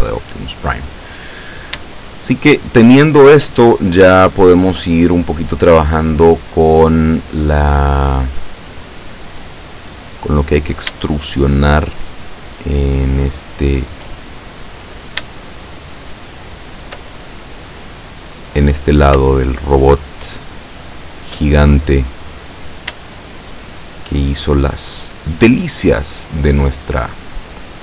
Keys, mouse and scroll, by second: 1.8 shift+click, 2.6 shift+middle click, 2.7-4.5 shift+drag, 4.5 middle click, 4.9-6.4 drag, 6.4-7.6 middle drag, 7.6-8.9 drag, 9.2 scroll up 1, 10.5 right click, 11.5 shift+right click, 12.0 shift+right click, 13.3 shift+right click, 14.4 shift+middle click, 15.8 shift+right click, 16.2 shift+right click, 17.2-19.4 shift+middle drag, 20.0 shift+right click, 21.0 shift+right click, 21.5-23.1 shift+middle drag, 23.6 shift+right click, 24.1 shift+right click, 24.7 shift+right click, 25.8-27.8 shift+middle drag.